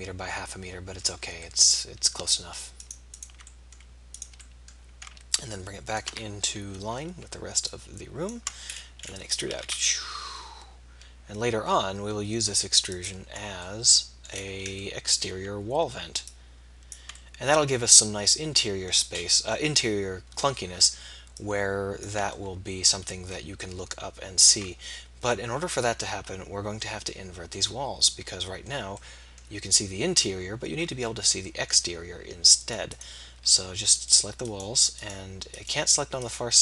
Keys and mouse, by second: 1.4 middle click, 1.8 middle click, 2.8 middle click, 3.5-4.8 middle drag, 6.7 KP_3, 9.5 e, 19.8 middle click, 20.6 middle click, 22.4 click, 23.2 middle click, 27.2 middle click, 32.6-33.9 drag, 33.9-36.2 middle drag.